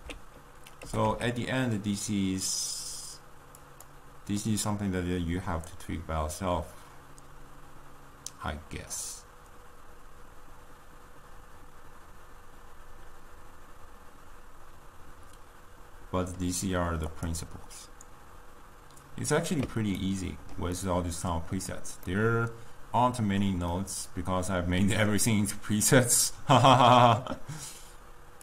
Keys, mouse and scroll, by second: 0.3 alt+s, 1.3 g, 4.6-7.8 middle drag, 17.1 click.